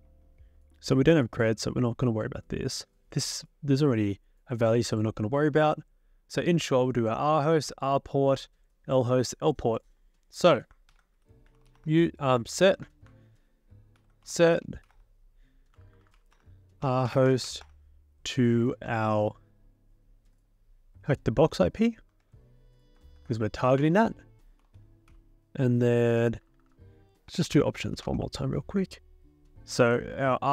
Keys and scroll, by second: 10.9 ctrl+l, 11.2-12.2 typing, 12.8 ctrl+c, 13.9-18.0 typing, 22.2 alt+Tab, 23.1 ctrl+v, 23.8 Return, 24.3-28.6 typing.